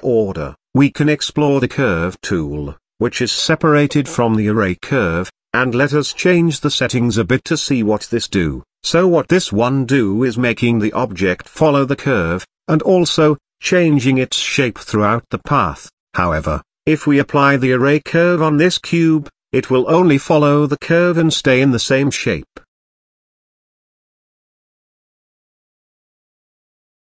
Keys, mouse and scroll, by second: 0.5 click, 1.0 shift+click, 1.5 j, 4.8-6.2 drag, 6.9-9.1 middle drag, 9.5-11.0 drag, 13.6 ctrl+z, 13.9 click, 14.2 click, 14.5 shift+click, 14.9 j, 17.0-18.5 drag, 19.7-21.3 middle drag, 25.7 click, 26.5 click.